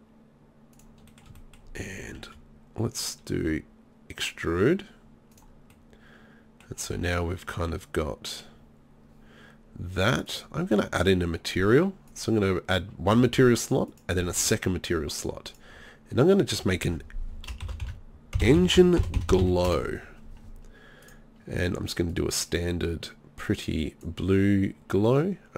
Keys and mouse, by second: 1.1-3.4 middle drag, 3.4 e, 5.5 click.